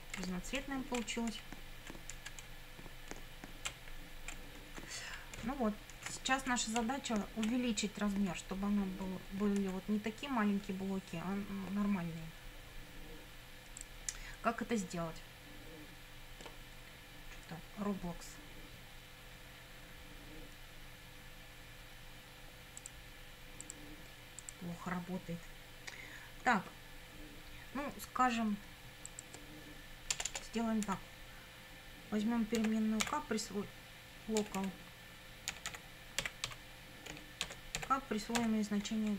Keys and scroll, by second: 0.3 Right, 0.6 Down, 1.0 Right, 1.4 Up, 2.5 Down, 3.7 Right, 4.4 Left, 4.6 Up, 5.4 Left, 6.0 Up, 6.8 Down, 7.7 Up, 30.1 Return, 30.9 Up, 32.6 k, 33.0 =, 34.4-39.1 typing.